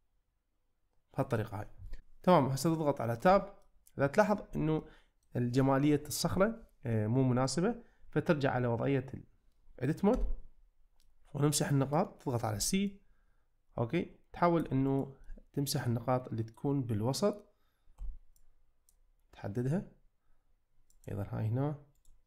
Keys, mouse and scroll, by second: 3.2 Tab, 3.6-4.2 middle drag, 4.9-5.2 middle drag, 6.4-7.5 middle drag, 10.1 Tab, 11.1-11.9 middle drag, 12.5 c, 14.9 click, 15.4-16.6 middle drag, 17.9 c, 20.9 click, 22.0 right click.